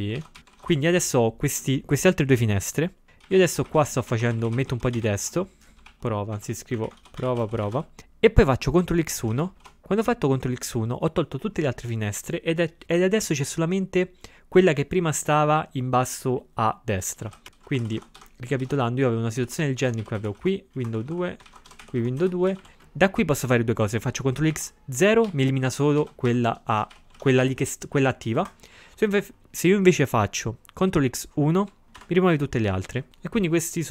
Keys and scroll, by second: 0.0-0.9 typing, 3.3-5.3 typing, 9.3 ctrl+x, 9.6 1, 17.3 ctrl+x, 17.6-18.4 typing, 20.8 ctrl+x, 24.5 ctrl+x, 25.2 0, 26.0 ctrl+x, 26.3 3, 26.6 c, 31.9 ctrl+x, 32.0 1.